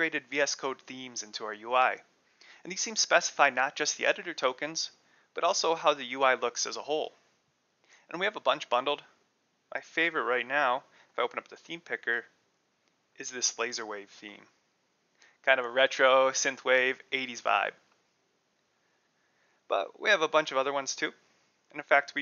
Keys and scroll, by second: 10.0 super+p, 10.6-11.8 typing, 12.8 l, 13.1 a, 14.3 super+n, 14.8 Return, 19.5 super+p, 20.1-22.2 typing, 21.1 Return.